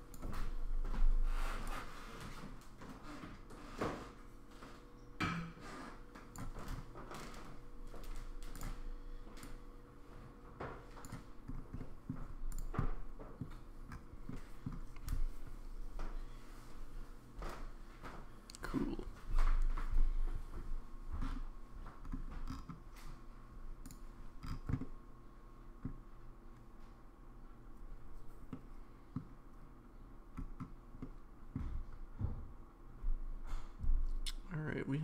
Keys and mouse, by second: 11.8 middle drag, 12.8-13.4 middle drag, 14.3-14.6 middle drag, 23.9 click, 24.8-25.8 middle drag, 28.5-29.2 middle drag, 31.0-31.5 middle drag.